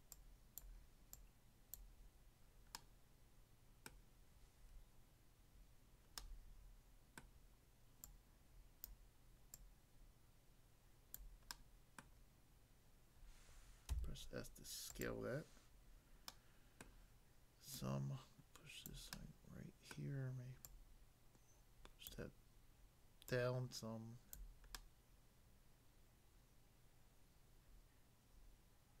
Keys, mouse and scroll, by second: 0.2 click, 0.6 click, 1.1 click, 1.7 click, 2.8 middle click, 3.9 middle click, 6.2 middle click, 7.2 middle click, 8.0 click, 8.9 click, 9.5 click, 11.2 click, 11.5 middle click, 12.0 middle click, 13.9 s, 14.9 click, 16.4 middle click, 16.8 middle click, 17.7 click, 18.8 click, 19.2 middle click, 19.9 middle click, 20.6 click, 22.0 click, 23.3 click, 24.4 click, 24.7 middle click.